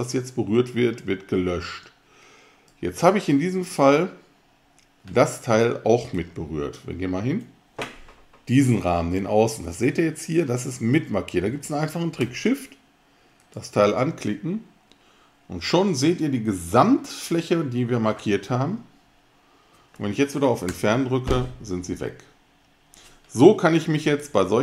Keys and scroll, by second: 20.7 alt+BackSpace.